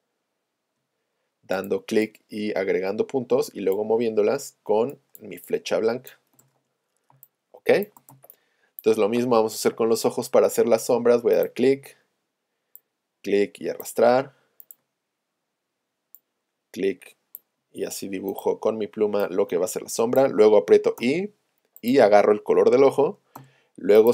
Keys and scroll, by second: 6.5 shift+super+a, 23.4 v.